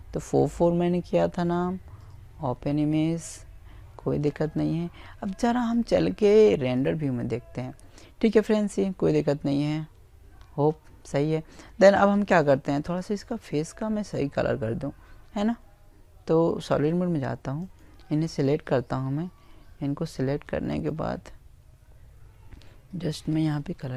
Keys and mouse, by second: 3.4 click, 10.7 click, 15.4-17.9 right drag, 18.5-20.3 right drag, 21.2 click, 22.8-23.9 middle drag, 22.8 right click.